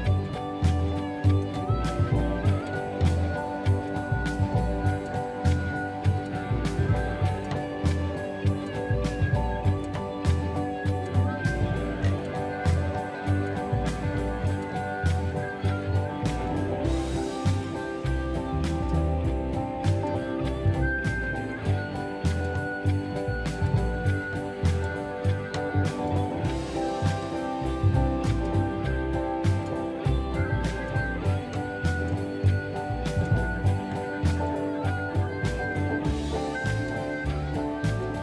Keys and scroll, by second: 0.7 shift+s, 3.7 m, 5.5 space, 5.6 Escape, 7.3 shift+m, 10.9 shift+space, 11.6 ctrl+shift+c, 15.7 ctrl+v, 17.6 q, 18.7-19.8 typing, 21.9 shift+k, 23.9 shift+k, 29.6 space.